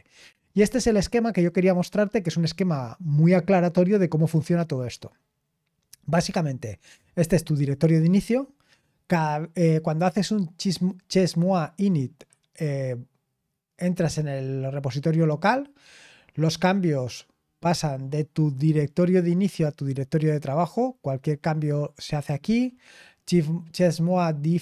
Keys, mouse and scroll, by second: 0.1-24.6 scroll up 1.